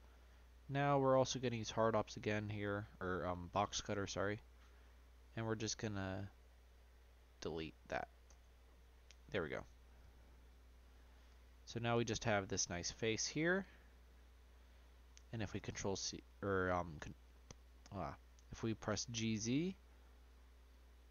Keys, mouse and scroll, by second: 0.3 Tab, 1.2 Tab, 1.8 click, 3.4-4.7 drag, 9.0-11.7 middle drag, 11.7 click, 14.9 g.